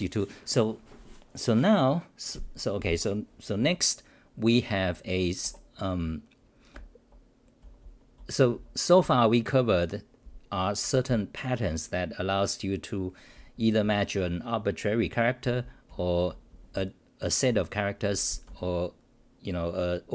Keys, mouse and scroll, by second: 6.7-8.5 typing, 13.8 n, 15.9 t, 16.3 n, 18.0 t, 18.5 n.